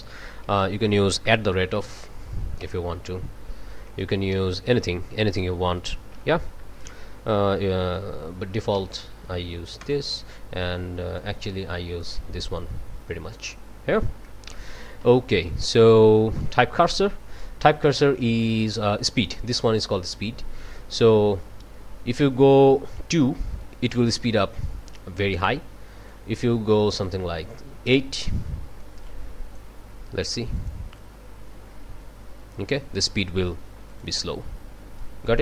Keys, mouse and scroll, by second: 0.6 BackSpace, 1.5 shift+2, 2.6 ctrl+Return, 4.3 BackSpace, 8.8 shift+\, 9.8 ctrl+Return, 11.2-12.2 drag, 13.5-14.0 scroll down 4, 14.2-15.6 drag, 15.9-16.3 scroll up 1, 16.3 click, 26.1-28.1 drag, 28.8-29.8 drag, 30.6 click, 33.9 click, 35.0-35.4 drag.